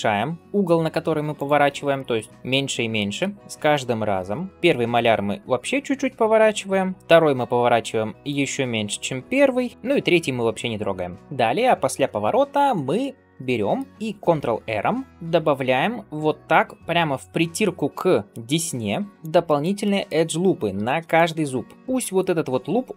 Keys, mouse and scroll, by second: 1.8 shift+middle click, 2.3 middle click, 3.4 click, 3.4 shift+right click, 3.4 shift+l, 3.6 shift+middle click, 4.2 middle click, 4.5 shift+r, 6.5 shift+middle click, 6.8 middle click, 7.0 click, 7.0 l, 7.4 middle click, 8.1 shift+right click, 8.5 shift+middle click, 9.6 r, 10.8 middle click, 11.2 ctrl+s, 11.2 scroll down 1, 12.4 scroll up 2, 12.8 middle click, 14.2 ctrl+r, 19.3 shift+middle click, 19.7 middle click, 20.6 ctrl+r.